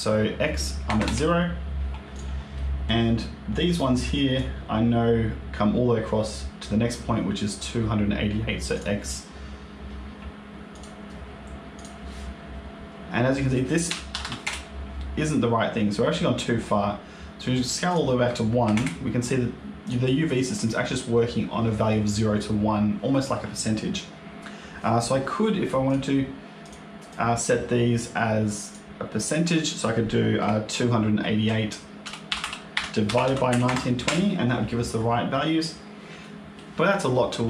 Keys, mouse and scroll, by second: 2.0 click, 2.4 middle click, 3.4 click, 8.6 click, 14.1 KP_8, 15.1-16.2 scroll down 12, 16.1-17.8 scroll up 12, 17.8 click, 19.3-20.4 scroll down 5, 19.7 click, 20.3 middle click, 25.7 click, 26.5 click, 27.0 click, 28.5 click, 29.1 click, 32.3 KP_8, 34.8-35.2 scroll up 2, 35.2 middle click, 36.1 middle click.